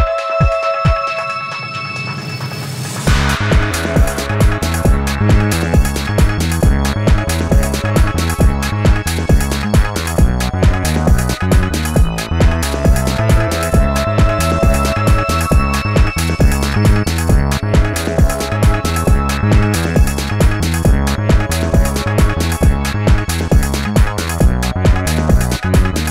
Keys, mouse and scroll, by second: 1.8 space, 8.3 alt+scroll up 1, 17.1 alt+shift+click.